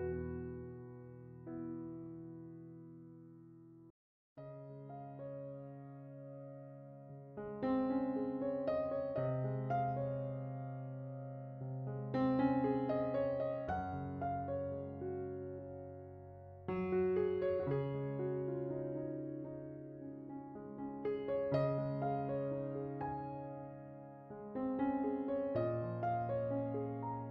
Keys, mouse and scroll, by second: 3.0-5.9 drag, 7.0-9.8 drag, 10.4 shift+a, 17.4 click, 19.5 ctrl+shift+click, 21.5-22.5 drag, 22.7-23.8 drag, 27.0-27.3 scroll down 8.